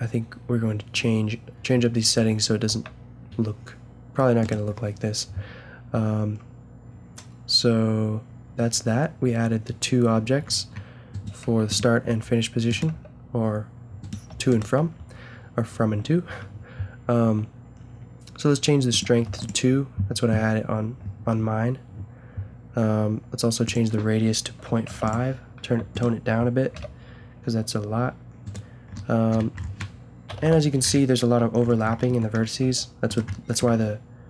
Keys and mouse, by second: 2.7 a, 4.4-6.2 drag, 11.1-12.7 right drag, 11.4 g, 12.1 a, 12.9 g, 14.3 a, 18.9-20.8 drag, 23.6-25.5 drag, 26.7 g, 30.3 KP_Decimal, 30.4 KP_5, 32.6 g, 33.8 g.